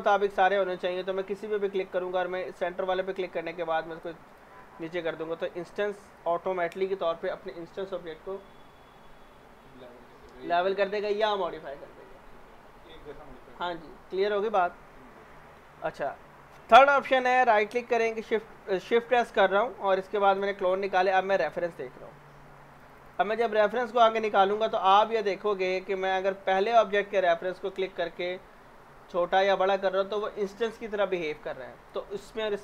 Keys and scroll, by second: 6.2 z.